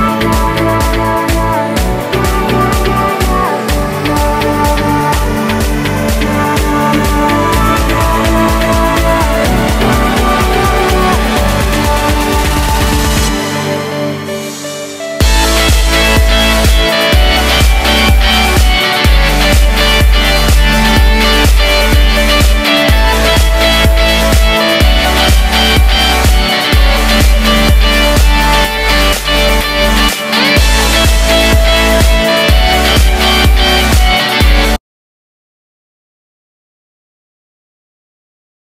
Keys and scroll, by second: 2.2 super+v, 11.4 super+z, 15.8 alt+Right.